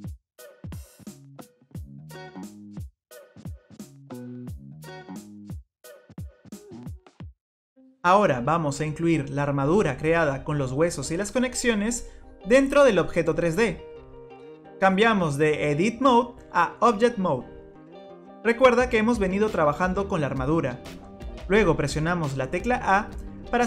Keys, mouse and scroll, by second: 0.9 click, 1.4 click, 5.3 click, 6.3 click, 8.9 click, 9.9 middle click, 15.7 click, 22.5 a.